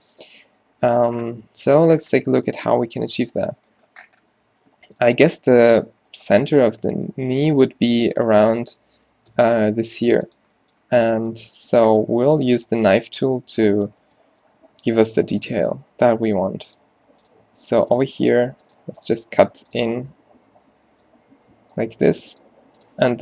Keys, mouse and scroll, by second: 1.0 u, 1.6 z, 7.7 middle click, 8.1 g, 9.2 o, 9.9 g, 13.4 g, 14.8 a, 15.7 k, 21.8 k.